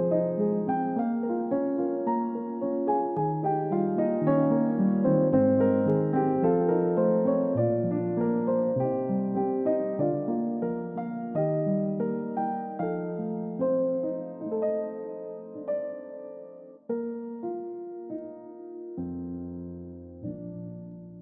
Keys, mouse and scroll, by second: 0.3-0.8 scroll up 1, 0.8 middle click, 1.1-1.5 scroll up 1, 3.2 middle click, 4.6 scroll up 1, 5.3-6.0 scroll down 1, 15.1 typing, 17.6 Return.